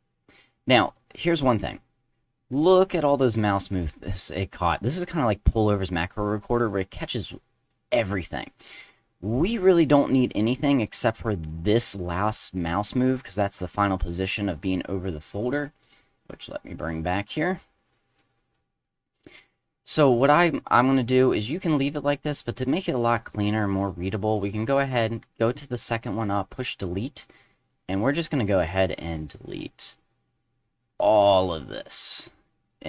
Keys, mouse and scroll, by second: 2.1-8.8 drag, 10.8 click, 15.7 click, 16.2-17.4 drag, 18.5 drag, 19.3 click, 21.2 click, 26.7 click, 27.4 click, 27.6 click, 27.8 click, 28.0 click, 28.2 click, 28.4 click, 28.5 click, 28.7 click, 29.1 click, 29.3 click, 29.6 click, 29.9 click, 30.2 click, 30.5 click, 30.7 click, 30.9 click, 31.2 click.